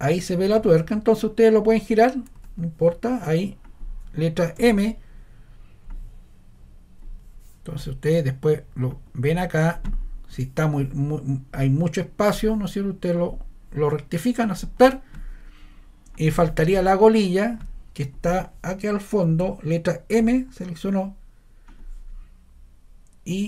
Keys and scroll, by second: 4.6 m, 19.3 ⟲, 20.1 m.